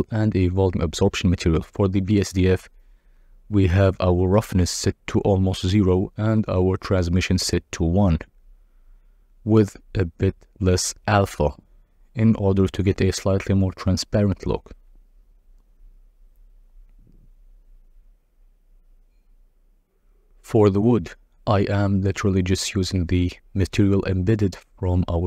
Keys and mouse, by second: 13.7-15.1 drag, 16.2 z, 18.2 z, 18.7 z, 20.9 click, 23.2 click.